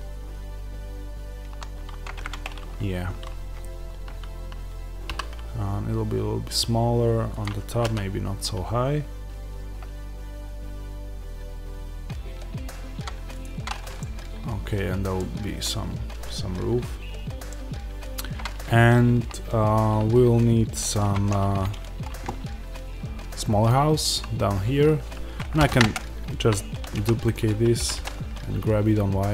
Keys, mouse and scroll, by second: 2.1 click, 5.0 s, 7.3 click, 7.6 g, 13.3 click, 13.9-29.3 middle drag, 18.2-20.9 scroll up 1, 20.9 Tab, 25.5 shift+d, 25.8 Return, 27.7 g.